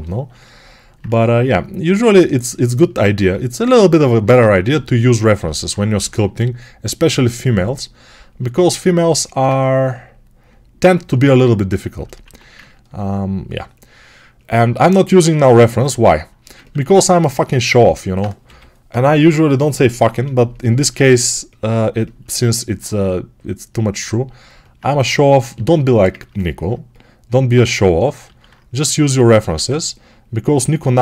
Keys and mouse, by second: 4.6-22.1 shift+right drag, 5.8 g, 12.1 1, 17.6 alt+q, 18.3 g, 18.8 ], 18.9 ], 20.7 alt+q, 25.9-31.0 ctrl+alt+right drag, 28.1 alt+q, 29.4 1.